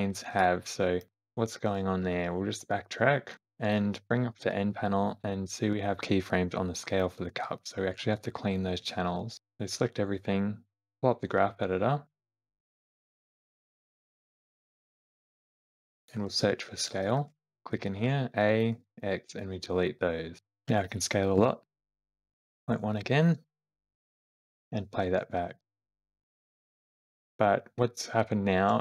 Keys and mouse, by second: 0.7 middle click, 1.9 ctrl+z, 2.2-2.8 ctrl+z, 3.5 ctrl+z, 4.2 n, 9.1 shift+middle click, 9.4 middle click, 12.2-13.7 drag, 13.9-15.3 drag, 15.9-17.5 drag, 17.8 a, 18.5 x, 20.5 s, 22.5 `, 24.5 space, 26.7 shift+middle click, 28.7 space.